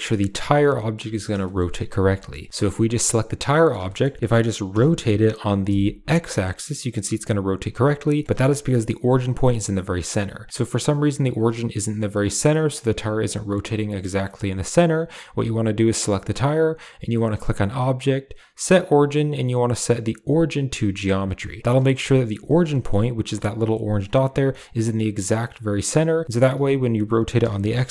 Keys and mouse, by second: 0.3 click, 0.7 shift+middle drag, 1.1 middle click, 1.3 shift+middle click, 2.1 shift+middle click, 2.5 g, 3.4 shift+middle click, 3.8 middle click, 4.6 r, 8.2 shift+middle click, 10.5 r, 15.1 g, 17.4-20.7 drag, 21.2-21.6 middle drag, 21.8 Tab, 22.3 Tab, 22.5 middle drag, 22.7 click, 23.5 middle drag, 23.7 click, 24.1 click, 24.4-24.9 drag, 24.4-25.6 middle drag, 25.9 g, 26.4 r.